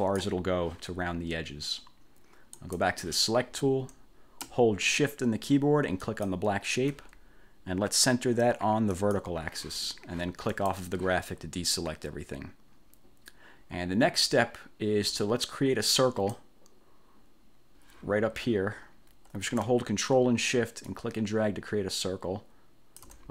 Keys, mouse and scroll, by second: 2.7 click, 6.2 shift+click, 9.1 click, 10.6 click, 16.0 click, 21.0-23.3 ctrl+shift+drag.